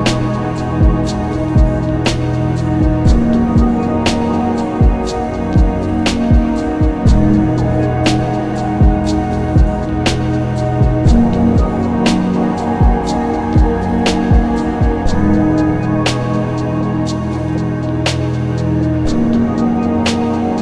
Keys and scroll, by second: 1.8 ctrl+z, 3.2 ctrl+z, 11.2 b, 11.4 p, 11.7 i, 15.6 ctrl+z.